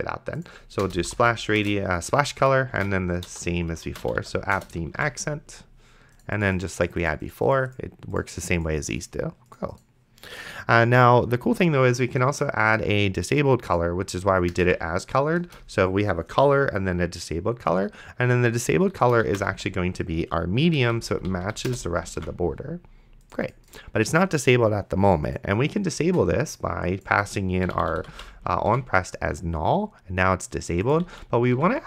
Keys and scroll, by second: 0.7-1.7 typing, 3.0 shift+c, 3.3 BackSpace, 4.1 p, 4.6 Return, 5.2 ctrl+s, 14.7 d, 15.5 Return, 19.4 p, 20.8 Down, 21.7 Return, 22.4 ctrl+s, 27.6-28.5 typing, 28.9 ctrl+s, 31.3 ctrl+z.